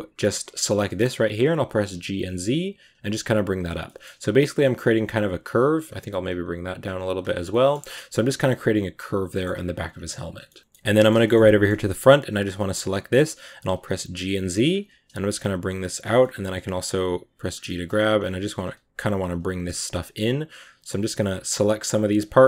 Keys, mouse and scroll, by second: 0.5 right click, 0.7 middle click, 1.4 g, 3.7-5.3 middle drag, 5.3 right click, 5.4 g, 7.2 scroll down 2, 7.3-11.7 middle drag, 11.7-12.4 scroll up 1, 12.4 scroll up 1, 12.5 right click, 12.8 middle click, 13.4 g, 16.1 middle click, 16.7 g, 19.1 right click, 19.2 g, 20.8 right click, 20.8 g, 21.5 right click, 21.5 g, 22.1 right click, 22.2 g.